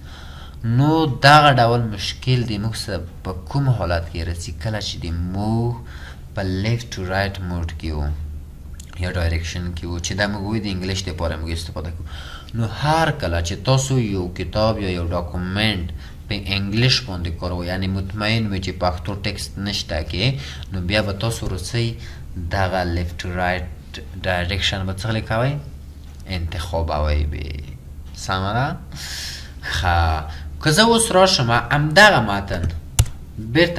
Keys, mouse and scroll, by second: 33.0 Return.